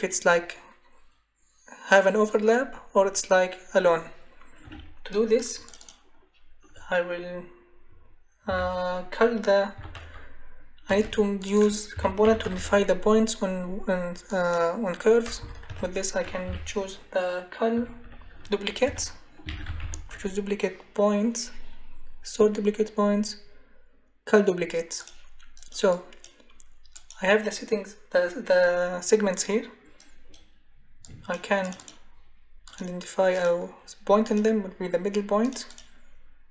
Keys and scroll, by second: 8.4 c, 9.8 u, 10.8-12.9 typing, 15.4 BackSpace, 15.7 Delete, 16.4 c, 17.7-20.6 typing.